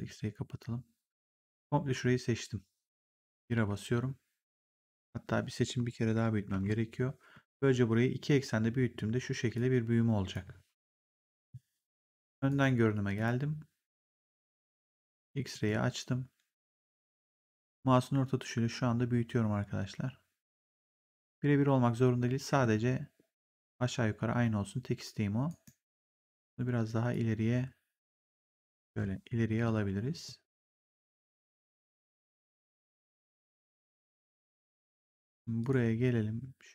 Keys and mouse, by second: 3.4 1, 7.2 r, 9.4 click, 10.9 ctrl+z, 12.4 right click, 13.1 click, 15.4 click, 16.5 middle click, 25.4 right click, 27.0 click, 28.8 ctrl+z, 29.4 w, 30.1 click, 35.5 click.